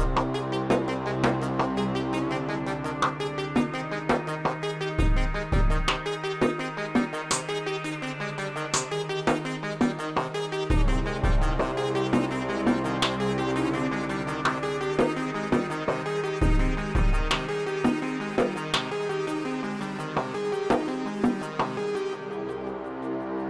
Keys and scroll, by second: 0.3 g, 0.8 y, 3.6 alt+a, 4.6 space.